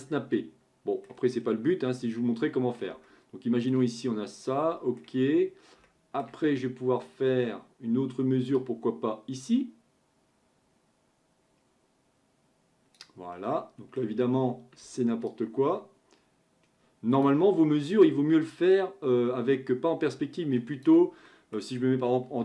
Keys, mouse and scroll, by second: 1.4-2.2 scroll down 9, 2.2-5.4 middle drag, 5.4-5.9 scroll up 1, 5.9-6.3 shift+middle drag, 6.3-8.6 scroll up 1, 8.6 click, 13.3-15.3 middle drag, 15.3-18.3 ctrl+drag, 18.5-21.2 drag, 21.2-22.3 middle drag, 22.3 KP_3.